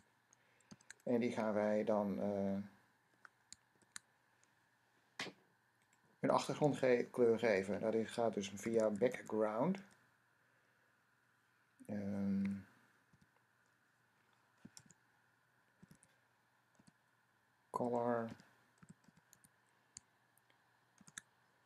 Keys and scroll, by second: 0.6 typing, 3.6 shift+], 6.5 typing, 8.6-9.6 typing, 12.0-12.7 typing, 14.5 typing, 15.7-19.2 typing, 20.8 typing.